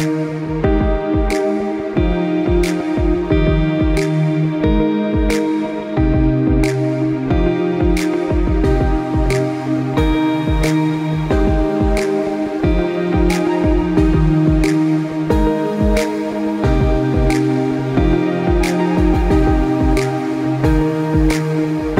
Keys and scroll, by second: 10.8 ctrl+alt+z.